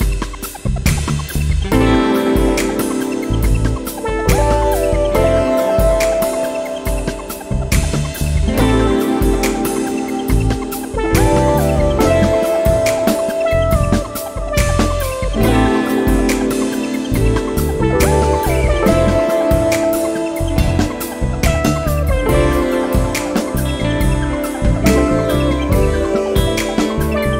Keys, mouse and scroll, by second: 1.3 click, 8.4 click, 10.4 click, 12.1 click, 13.8 click, 15.6 click, 19.5 click, 21.7 click, 26.4 click.